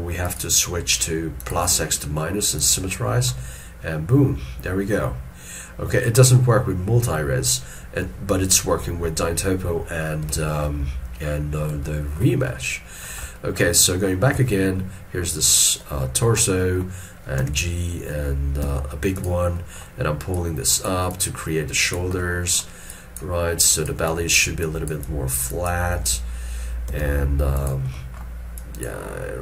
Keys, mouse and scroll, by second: 3.5 middle click, 10.4 middle click, 11.0 scroll down 1, 11.9 shift+middle click, 12.5 scroll down 1, 12.6 middle click, 13.3 middle click, 14.5 alt+q, 16.1 shift+middle click, 16.5 shift+middle click, 19.7 middle click, 22.8-23.3 scroll down 1, 26.1 s, 28.0 middle click.